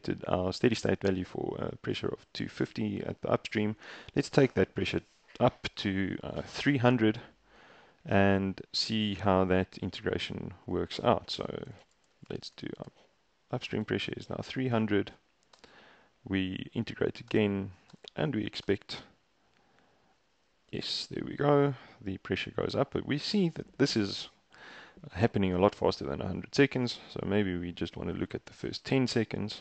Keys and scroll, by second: 10.6 Escape, 11.0-14.1 typing, 15.6 shift+Return, 17.4 shift+Return, 18.0 shift+Return, 18.7 shift+Return.